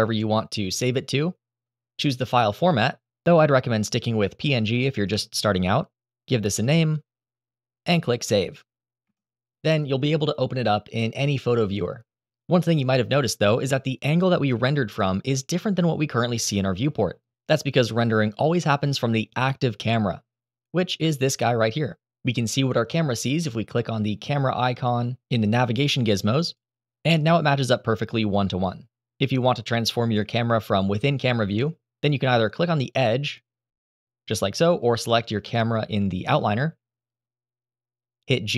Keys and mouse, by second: 21.0 click, 26.2 click, 31.7 click, 33.0 click, 35.2 click, 38.2 g.